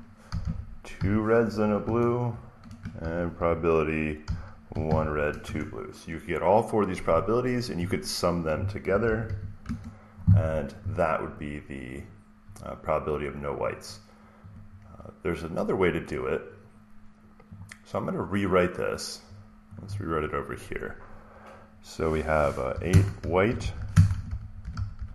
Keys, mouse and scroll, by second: 0.0-5.4 typing, 8.5-9.7 typing, 11.2-14.1 drag, 11.6 typing, 14.4-16.5 drag, 17.5-19.5 drag, 19.7-21.8 drag, 22.4-25.1 typing.